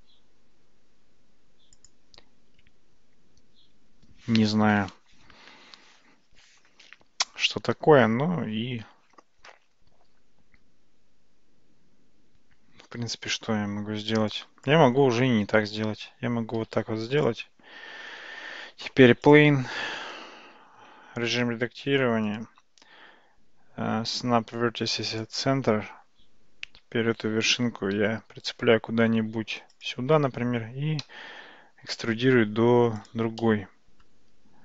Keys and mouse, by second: 1.9 click, 14.4 click, 16.6 x, 18.4 shift+a, 20.8 Tab, 22.3-25.3 right drag, 28.0 g, 32.6 e, 33.5 middle click.